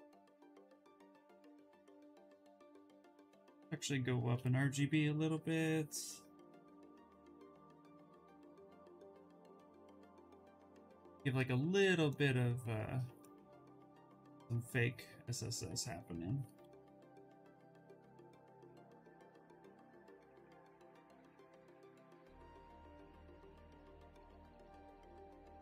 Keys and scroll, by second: 2.1 ctrl+z, 2.7 space.